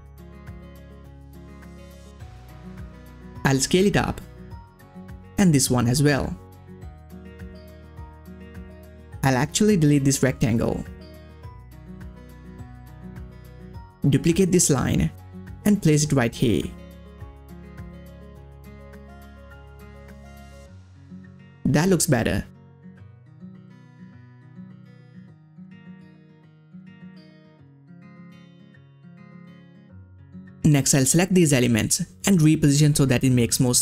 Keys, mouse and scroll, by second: 1.0 scroll down 1, 1.8 click, 1.9 ctrl+scroll down 1, 3.1-8.0 drag, 8.4-9.2 ctrl+scroll down 1, 9.2-9.5 ctrl+scroll up 1, 10.1 click, 10.6 click, 10.6-16.4 drag, 16.4 ctrl+scroll up 1, 18.0-20.6 drag, 21.4 ctrl+scroll down 1, 21.5 ctrl+scroll up 1, 22.3 ctrl+scroll down 1, 23.1-26.4 drag, 26.4 ctrl+scroll down 1, 27.4-28.0 ctrl+scroll up 1, 28.3 click, 28.5 space, 28.6 click, 28.9 space, 30.0 space, 30.1 click, 30.6 scroll down 1, 31.4-33.8 drag.